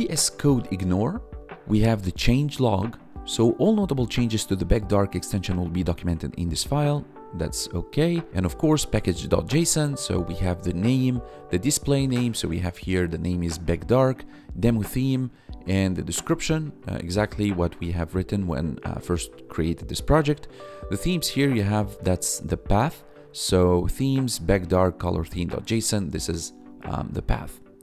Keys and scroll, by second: 10.4 1, 17.7 1, 21.3 1, 25.6 1.